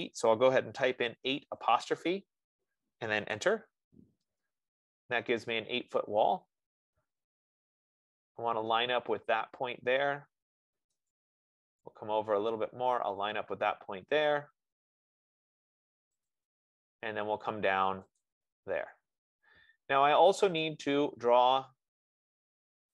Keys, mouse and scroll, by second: 0.4 8, 1.5 ., 3.6 Return, 11.5-16.4 drag, 16.6-18.5 drag, 21.0 click.